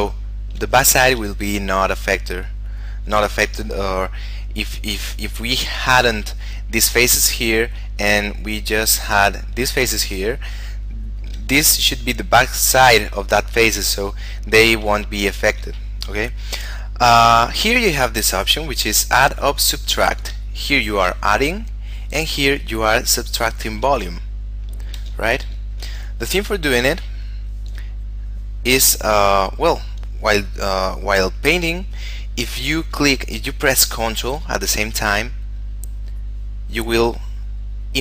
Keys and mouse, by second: 1.6 shift+middle click, 4.8 shift+middle click, 8.2 shift+middle click, 10.6 shift+middle click, 15.3 shift+middle click, 19.4 click, 20.6 shift+middle click, 21.9 click, 24.3 shift+middle click, 25.4 ctrl+z, 27.4 click, 36.0 ctrl+click, 36.5 ctrl+click, 36.9 ctrl+click, 37.5 ctrl+click.